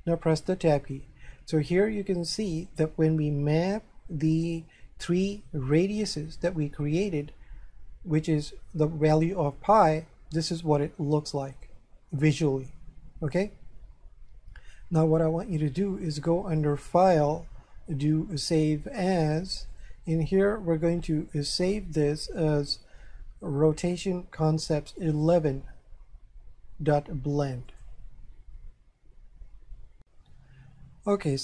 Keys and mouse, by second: 0.5 Tab, 16.6 click, 19.7 click, 25.1 click, 27.7 click, 30.0 F4, 30.4 F3.